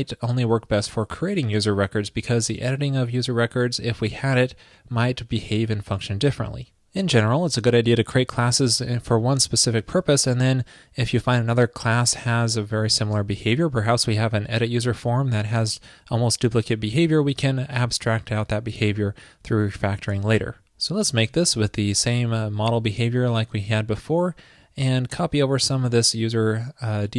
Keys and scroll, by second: 21.6 super+v.